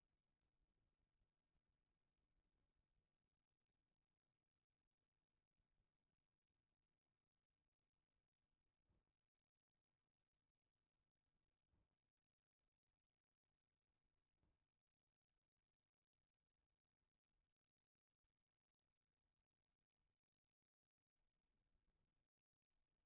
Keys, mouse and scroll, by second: 6.6 KP_Decimal, 8.9-9.6 shift+middle drag, 10.1 click, 13.4-15.3 drag, 16.9-23.0 drag.